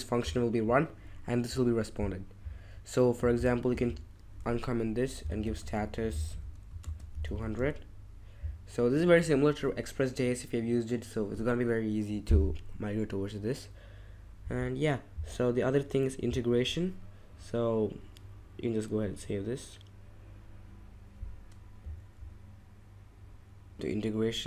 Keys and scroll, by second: 4.6-8.0 typing.